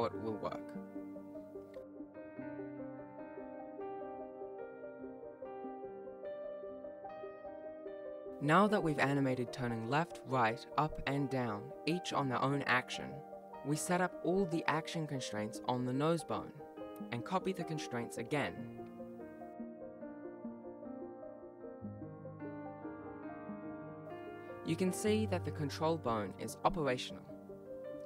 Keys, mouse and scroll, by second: 2.2 click, 2.5 click, 2.8 click, 2.9 right click, 3.1 click, 3.1-7.9 typing, 3.2 shift+click, 3.3 scroll up 3, 3.4 shift+right click, 3.5 right click, 3.6 shift+right click, 3.6 right click, 3.7 shift+right click, 3.7 ctrl+z, 3.9 click, 3.9 right click, 4.2 shift+right click, 4.2 scroll up 1, 4.6 click, 4.7 click, 4.9 scroll up 1, 5.0 click, 5.2 click, 5.6 shift+right click, 6.1 right click, 6.3 right click, 6.5 click, 6.5 right click, 6.7 shift+click, 6.8 shift+right click, 6.9 click, 7.1 ctrl+s, 7.5 shift+right click, 7.7 right click, 7.9 shift+right click, 8.0 click, 8.3 right click, 8.6 click, 8.8 right click, 8.9-9.2 click, 9.0 click, 9.1 click, 9.2 right click, 9.4 ctrl+shift+c, 9.4 shift+right click, 9.5 right click, 9.6 shift+right click, 9.8 ctrl+shift+c, 9.9 right click, 10.1 shift+right click, 10.2-10.5 click, 10.3 click, 11.0 click, 11.2 click, 12.6 click, 12.7 ctrl+s, 12.9 ctrl+s, 12.9 click, 13.2 click, 13.6 click, 13.8 click, 14.0 click, 14.1 click, 14.6 click, 15.9 scroll down 4, 16.1 click, 16.6 click, 17.2 click, 17.4 scroll down 1, 17.6 click, 17.7 click, 17.8 BackSpace, 17.9 BackSpace, 18.1 click, 18.3 ctrl+s, 18.4 right click, 19.0 alt+g, 19.1 ctrl+s, 19.2 shift+right click, 19.3 right click, 19.5 shift+right click, 19.6 right click, 19.7 shift+click, 19.7 shift+right click, 20.1 click, 20.1 scroll up 6, 20.3 click, 20.3-20.8 scroll down 3, 20.7 click, 20.8 ctrl+middle click, 20.8 scroll up 10, 20.9 click, 20.9-21.3 scroll down 5, 21.1 scroll up 6, 21.3 click, 21.3 ctrl+s, 21.4 click, 21.5 click, 21.7 click, 21.7-22.3 scroll down 6, 22.1 click, 22.3 click, 22.3 t, 22.3 u, 22.3 r, 22.3 n, 22.6 ctrl+s, 22.6 click, 22.6 scroll down 2, 22.7 click, 22.8 click, 23.3 click, 23.4 click, 23.5 alt+g, 23.5 click, 23.5 a, 23.7 ctrl+s, 23.7 right click, 23.8 click, 23.8 right click, 24.0 alt+a, 24.0 click, 24.1 click, 24.1 right click, 24.2 shift+right click, 24.7 shift+right click, 24.9 shift+click, 25.1 shift+right click, 25.1 F3, 25.4 click, 25.5 click, 25.5 right click, 25.6 right click, 26.7 alt+g, 26.8 ctrl+s, 27.4 shift+click, 27.5 g.